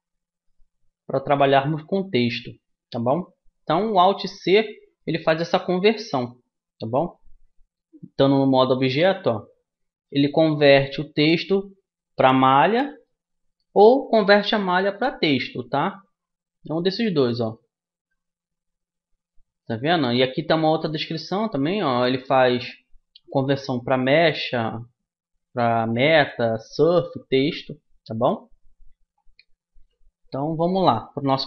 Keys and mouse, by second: 1.5 right click, 4.2-7.4 right drag, 7.0 alt+c.